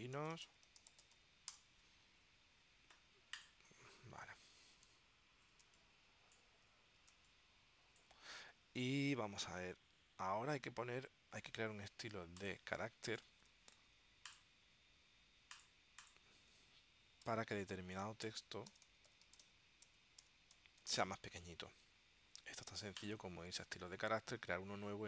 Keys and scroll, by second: 0.0-1.8 typing, 5.7 space, 7.3 space, 12.7 space, 17.1-21.5 typing.